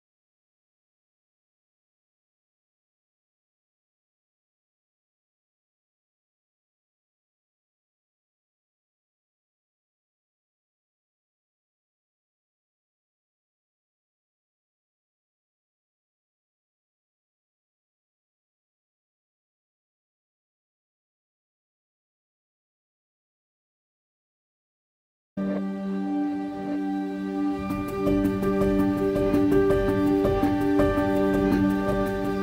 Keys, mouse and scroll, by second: 1.2 click, 5.6 click, 6.4 scroll up 1, 8.7 click, 9.5 scroll up 1, 12.9 click, 13.8 KP_0, 14.5 scroll up 1, 16.1-16.4 scroll down 1, 18.2 a, 23.6-28.1 drag, 26.6 Tab, 29.5 g, 31.8 click.